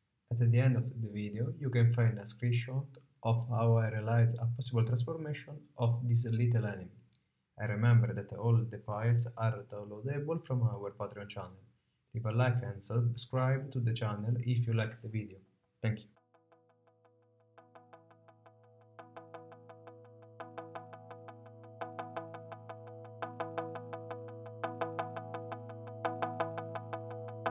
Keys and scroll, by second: 0.0 super+z, 0.2 space, 27.1 space.